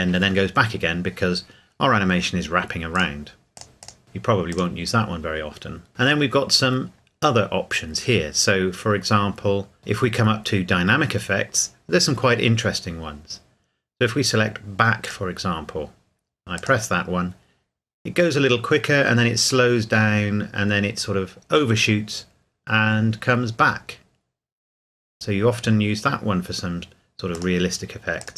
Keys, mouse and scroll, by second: 2.9 click, 15.0 click, 27.3 click.